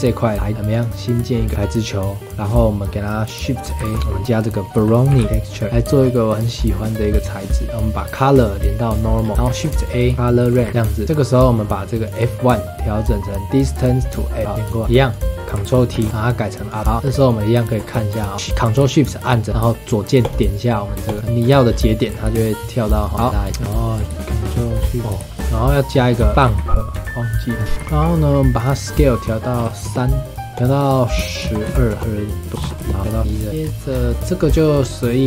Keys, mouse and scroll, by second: 0.7 click, 1.5-3.7 middle drag, 3.7 shift+a, 5.7 middle drag, 6.0-7.3 scroll up 7, 6.3 middle click, 7.3-9.2 drag, 9.2 scroll down 4, 9.3 middle click, 9.4 shift+a, 10.7-12.0 middle drag, 12.0-14.4 drag, 14.4 middle click, 14.8 middle drag, 15.1 click, 15.9 ctrl+t, 16.1-16.6 middle drag, 16.6 drag, 16.8 middle click, 17.2 ctrl+shift+click, 18.1-18.6 scroll up 4, 20.2 ctrl+shift+click, 21.1 ctrl+shift+click, 21.4-22.3 scroll down 8, 22.3 ctrl+shift+click, 22.9 ctrl+shift+click, 23.1 scroll down 1, 23.2 middle click, 23.3 drag, 23.6 scroll down 3, 23.7-24.4 middle drag, 24.4 ctrl+shift+click, 25.0 middle click, 25.2 shift+a, 27.5 middle click, 27.7 click, 27.8 scroll up 2, 27.8 middle click, 28.5-32.6 drag, 32.6 KP_1, 32.9 middle click, 33.2 click, 33.5 middle drag, 33.6-34.0 scroll down 3, 34.0-34.7 scroll up 6, 34.1 middle click, 34.7 middle click.